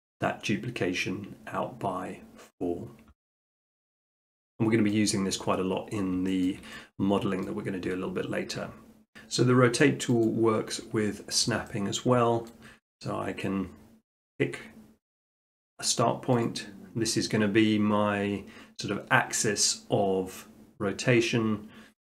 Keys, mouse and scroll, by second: 1.8 middle click, 4.2 middle click, 4.9 middle click, 5.7 middle click, 6.4 shift+middle click, 7.4 middle click, 10.2 click, 10.9 middle click, 11.5-12.3 middle drag, 16.5 click, 17.5 click.